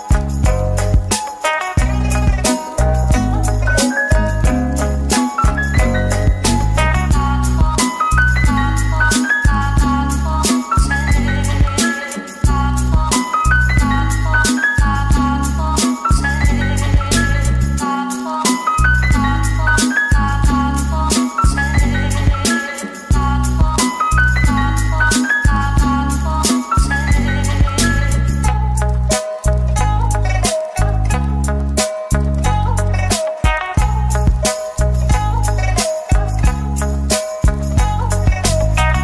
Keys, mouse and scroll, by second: 0.2 double click, 0.9 ctrl+l, 1.6 middle click, 2.5 g, 3.6-5.3 typing, 7.5 double click, 8.2 ctrl+l, 8.9-9.2 typing, 11.1 middle click, 12.4 ctrl+l, 13.1-13.6 typing, 15.4-15.7 typing, 16.7-17.1 typing, 18.0 middle click, 20.1 ctrl+l, 20.9-21.4 typing, 22.9 middle click, 23.4 Tab, 25.2 right click, 26.6 Tab, 27.4 right click, 29.4 Tab, 30.0 double click, 30.9-31.8 typing, 33.9 right click, 35.7-36.6 typing.